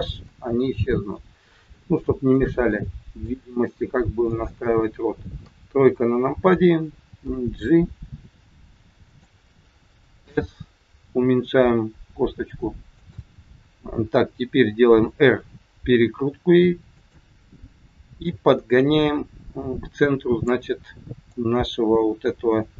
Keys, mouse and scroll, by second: 0.6 scroll up 3, 1.0 middle click, 2.7 middle click, 3.4 scroll down 2, 4.2 click, 5.3 KP_3, 7.2 g, 10.1 s, 14.8 r, 18.2 click.